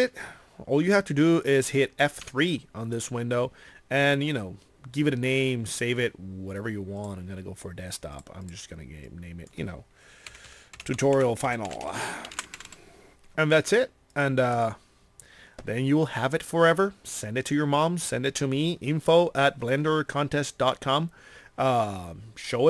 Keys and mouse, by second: 3.8 middle click.